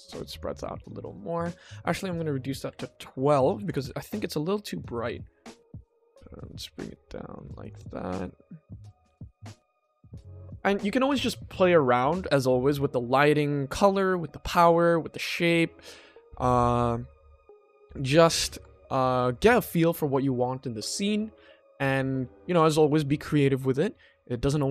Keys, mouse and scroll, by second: 0.5 click, 1.5-2.7 drag, 3.5 click, 3.8 ctrl+s, 5.7 click, 6.1 g, 7.6 click, 8.2 click, 8.7 s, 9.6 g, 10.1 click, 10.4 ctrl+s, 17.0-18.2 drag, 18.4 ctrl+z, 19.2 click, 19.5 ctrl+s.